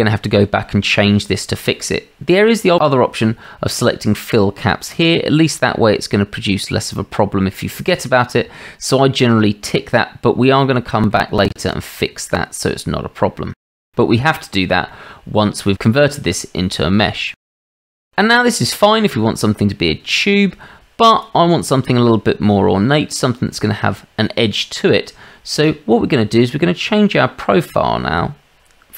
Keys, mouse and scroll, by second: 4.9 click, 10.6-11.1 drag, 11.9-12.3 drag, 14.0-15.0 shift+middle drag, 17.3-17.6 shift+middle drag, 18.3-18.7 middle drag, 19.4-19.8 middle drag, 21.2-22.3 drag.